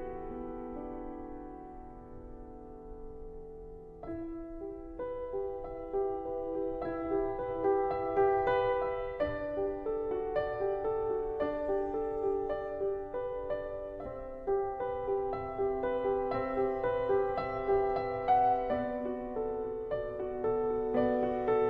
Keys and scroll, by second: 0.7 ctrl+z, 0.9 ctrl+z, 1.2 ctrl+t, 2.0 ctrl+t, 2.8 ctrl+t, 3.4 ctrl+Down, 3.5 ctrl+Right, 3.6 ctrl+Left, 4.1 ctrl+e, 4.2 ctrl+z, 4.5 ctrl+e, 5.7 ctrl+e, 6.4 ctrl+z, 6.8 ctrl+z, 7.2 ctrl+z, 8.0 ctrl+z, 8.9 ctrl+z, 9.5 ctrl+z, 10.6 ctrl+z, 11.6 ctrl+z, 14.4 ctrl+z, 14.7 ctrl+z, 17.7 ctrl+s, 18.4 ctrl+z, 19.7 ctrl+t, 20.9 ctrl+z.